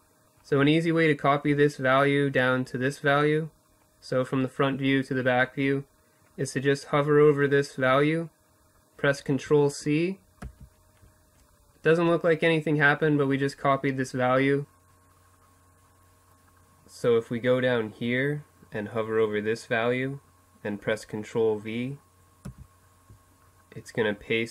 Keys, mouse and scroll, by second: 20.2 ctrl+v.